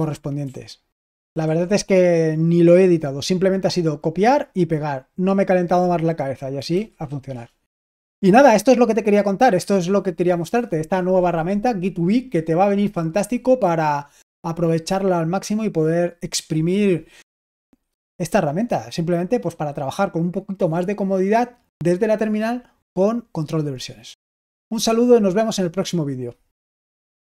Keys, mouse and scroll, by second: 6.7-7.5 typing, 27.3 click.